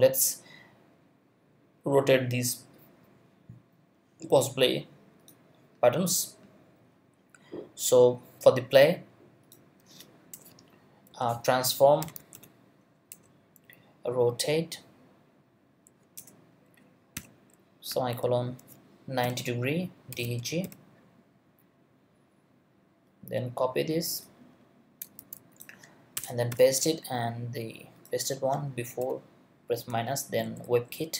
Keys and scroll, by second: 10.3 Return, 11.1-12.8 typing, 13.1 Return, 14.0 Down, 16.2 Return, 17.1 ;, 17.9 Left, 19.0-21.1 typing, 25.2 super+c, 26.1 super+Return, 26.5 super+v, 29.0 -, 30.4 Down.